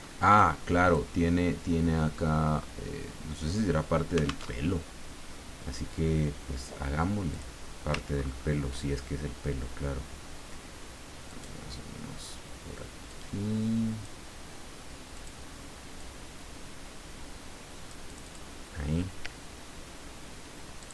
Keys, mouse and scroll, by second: 0.4 click, 4.4 alt+Tab, 7.3 click, 8.2-8.8 ctrl+scroll up 2, 11.3 click, 13.1-14.6 drag, 15.1-18.5 drag, 20.8 click.